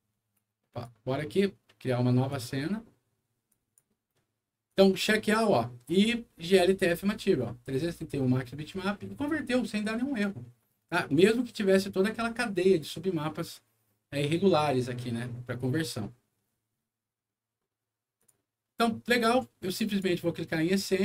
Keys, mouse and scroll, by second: 0.6 click, 2.2 click, 3.4 click, 4.6 click, 18.1 click, 19.8 click.